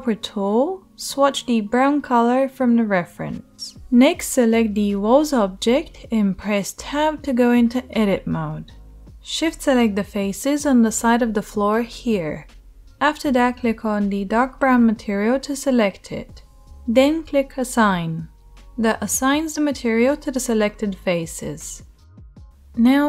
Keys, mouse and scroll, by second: 5.7 Tab, 9.8 shift+click, 9.9-12.8 shift+middle drag, 12.8 click, 12.9-17.6 middle drag, 17.6-23.0 drag, 22.9 Tab.